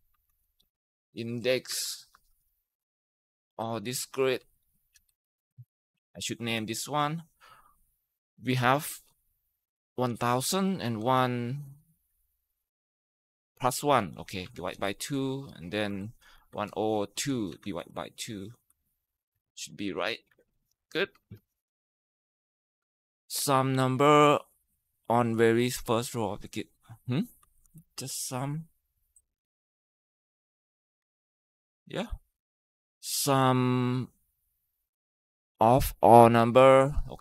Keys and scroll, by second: 0.0-1.7 typing, 4.2 Down, 4.9 ctrl+shift+Right, 5.2 ctrl+shift+Down, 6.4 ,, 9.6-10.8 typing, 13.4-20.8 typing, 19.3 ctrl+Return, 25.0 typing, 27.0-28.1 typing, 29.4 ctrl+shift+Right, 30.8 Tab.